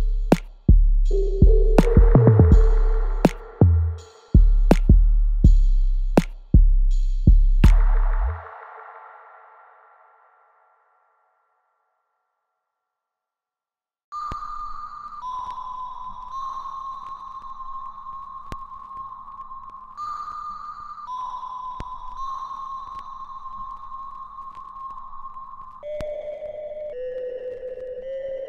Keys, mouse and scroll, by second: 1.2-5.2 ctrl+drag, 5.2-6.9 alt+right drag, 6.9 click, 10.6-12.2 alt+right drag, 12.2-22.5 ctrl+drag.